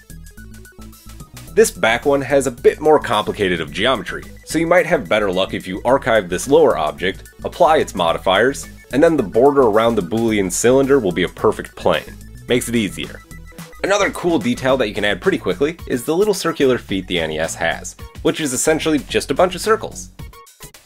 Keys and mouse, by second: 0.0 a, 0.3 ctrl+l, 0.6 s, 0.8 g, 1.0-2.2 right drag, 2.1 g, 2.3 g, 2.5-4.0 right drag, 2.6 g, 3.3 g, 4.0-6.3 drag, 6.3-7.4 middle drag, 7.4-11.3 drag, 9.3 Tab, 9.4 Tab, 14.1 KP_7, 15.3 shift+a, 15.6 Tab, 15.8 g, 15.9 Tab, 16.2 right drag, 16.4 KP_3, 16.6 g, 16.8 middle click, 17.1 right click, 17.2 middle click, 17.4 ctrl+KP_7, 17.9-19.9 typing, 18.5 Tab, 20.4 right click.